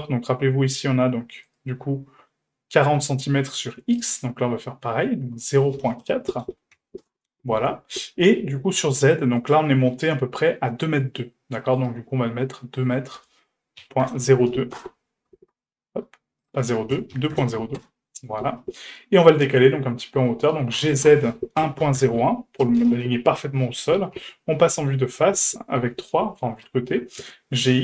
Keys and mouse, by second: 1.5 right click, 4.0-5.5 right drag, 5.5-7.7 drag, 9.4 right click, 11.8 right click, 13.0-15.3 drag, 16.5-18.3 drag, 18.6-19.6 middle drag, 20.6 middle click, 20.7 g, 24.1 KP_1, 25.4 KP_3, 26.5 g.